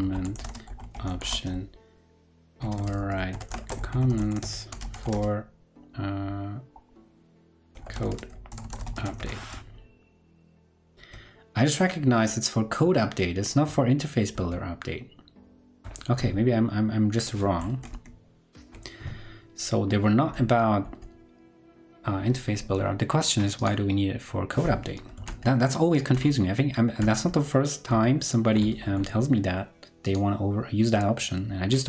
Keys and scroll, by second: 14.8 ctrl+Left, 18.4 ctrl+Right, 21.3 ctrl+Left, 25.2 ctrl+super+Left, 26.1 ctrl+super+Left, 26.9 ctrl+super+Left, 27.8 ctrl+super+Left.